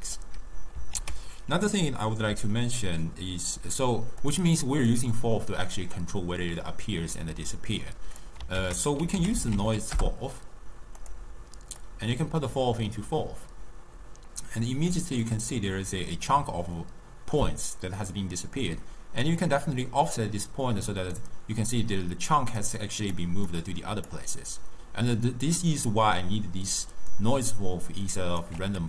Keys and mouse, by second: 1.0 ctrl+a, 4.9-8.0 drag, 8.6 ctrl+a, 11.9-14.9 drag, 14.9 d, 15.3-16.3 drag, 16.3-18.7 d, 19.3-21.8 drag, 21.8-27.0 typing, 22.4 click, 22.9 click, 23.6-24.2 drag, 27.2-28.5 right drag, 28.5 d, 28.6 d.